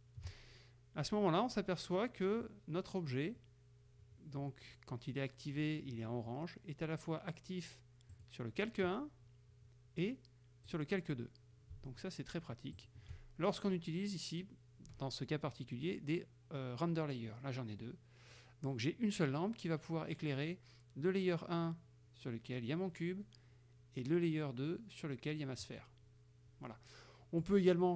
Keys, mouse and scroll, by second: 8.2 click, 10.8 click, 12.8 shift+click, 25.7 click, 27.5 right click.